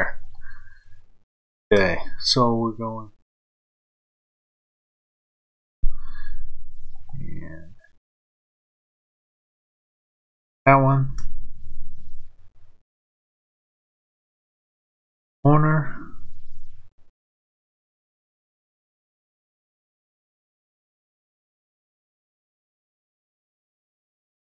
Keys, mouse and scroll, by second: 0.2 click, 2.9 shift+click, 5.6 f, 6.9 click, 9.6 shift+click, 11.0 f, 13.5 click, 17.6 shift+click, 18.8 f, 19.8 shift+click, 21.6 shift+click, 23.3 click.